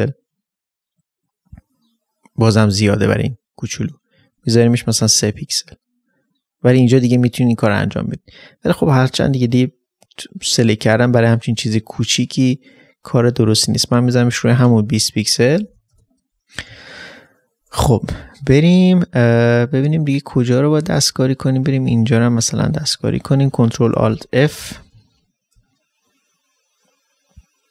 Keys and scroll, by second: 8.2 ctrl+space, 8.8 ctrl+d, 16.6 ctrl+d, 16.7 ctrl+space, 23.4 ctrl+space, 24.0 ctrl+alt+f, 24.9 space.